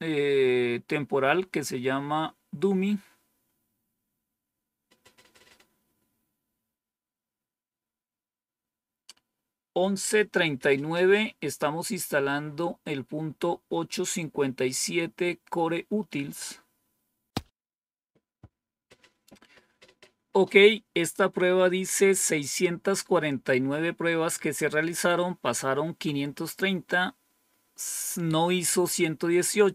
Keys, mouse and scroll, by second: 4.8-5.5 scroll down 2.